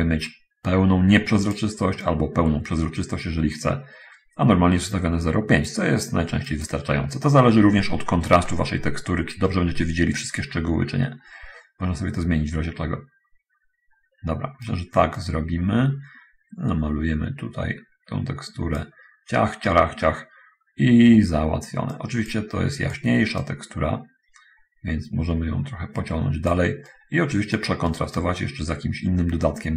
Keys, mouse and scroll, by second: 2.3-5.9 drag, 6.7 click, 8.6 middle click, 9.8-14.7 right drag, 15.5-19.1 drag, 22.1-22.7 drag, 23.1 click, 23.6-26.7 drag, 27.2-28.0 right drag, 28.2 right click, 28.6-29.7 right drag.